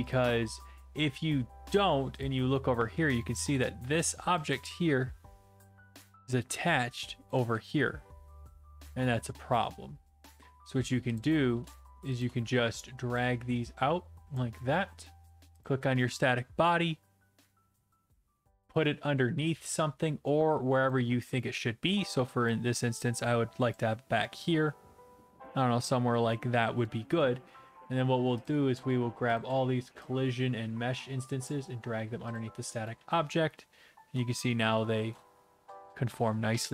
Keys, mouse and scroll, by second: 0.1 click, 0.8 scroll down 3, 1.4 scroll up 3, 1.6 scroll, 2.2 click, 2.5-3.4 typing, 3.5 right click, 7.3 click, 7.4 ctrl+z, 11.2 click, 14.3 click, 15.6 click, 20.9 click, 21.3 d, 21.8 d, 21.9 d, 22.7 right click, 22.7 d, 23.7 click, 23.9-25.8 d, 25.9 shift+d, 26.8 click, 28.5 right click, 29.4 shift+right click, 31.5 click, 32.4 click, 32.7-34.3 typing, 35.1-36.7 right drag.